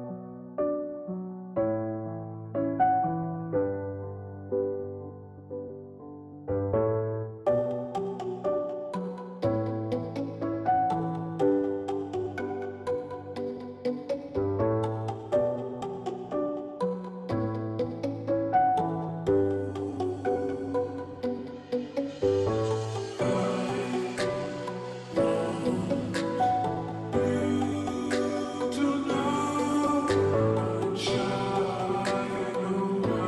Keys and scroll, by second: 0.3 Left, 2.7-4.3 space, 4.9 space, 8.1-8.9 space, 16.3 ], 16.5 ], 17.0-22.4 ], 28.7-29.4 space.